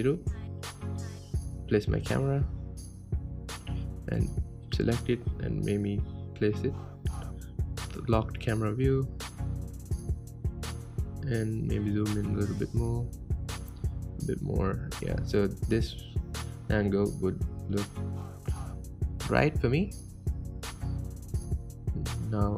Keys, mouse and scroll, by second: 0.6 g, 1.9-3.0 middle drag, 3.0 ctrl+alt+KP_0, 4.4 click, 5.5 n, 7.5 click, 7.9 n, 8.2-10.8 middle drag, 10.8-11.2 drag, 11.6-13.2 middle drag, 13.2-13.7 scroll up 1, 13.7-14.7 shift+middle drag, 14.7-15.4 scroll up 1, 15.4-16.3 scroll up 1, 16.3-22.5 shift+middle drag.